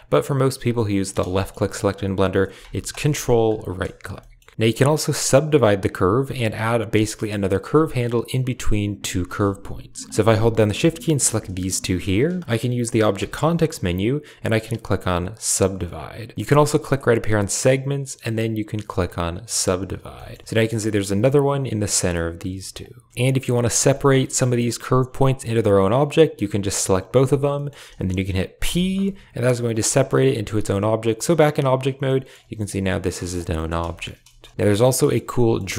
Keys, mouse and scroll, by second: 1.2 shift+middle click, 2.8 ctrl+right click, 2.9 typing, 4.0 shift+middle click, 11.0 shift+click, 13.0 w, 17.5-19.5 drag, 20.0 shift+middle click, 20.5 click, 20.7 g, 22.2 g, 23.8 shift+middle click, 26.0 click, 26.7 shift+click, 27.4 shift+middle click, 28.5 p, 29.6 Tab, 30.0 g, 31.9 middle drag, 32.3 g, 32.7 middle drag, 33.1 shift+middle click, 33.4 middle click, 33.8 shift+middle click, 34.1 shift+middle click, 34.5 shift+middle click, 34.8 middle click, 35.2 shift+middle click.